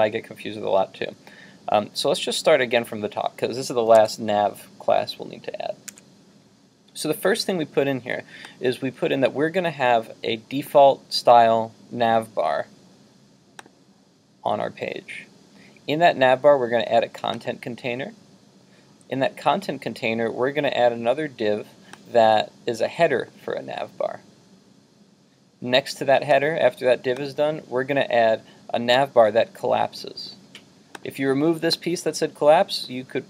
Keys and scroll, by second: 4.0 super+Tab, 6.0 super+Tab.